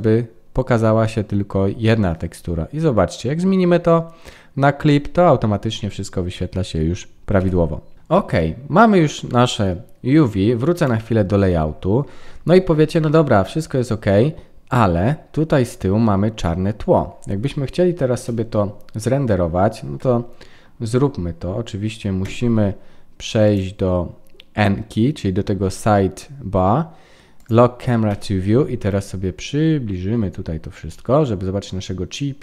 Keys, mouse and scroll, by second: 10.8 click, 11.6-12.9 scroll up 19, 13.1 middle click, 14.8-16.6 scroll up 5, 18.1 KP_0, 20.8-21.3 scroll up 3, 21.3-22.2 scroll down 1, 22.2 n, 23.4 click, 27.3 click, 28.0 n, 28.4-30.8 scroll up 29, 30.8 middle click.